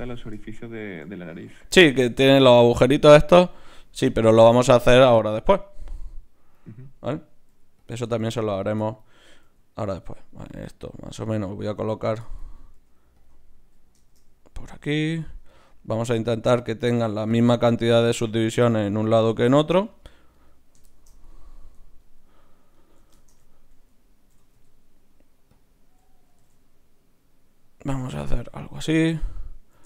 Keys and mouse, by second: 7.5 g, 8.5-10.3 drag, 9.4 g, 10.4 g, 11.3 g, 12.7 g, 13.2 click, 13.2 middle click, 13.2 right click, 13.6 KP_1, 17.1-20.3 drag, 22.0-24.0 right drag, 24.3 e, 26.3 g, 28.7 right click.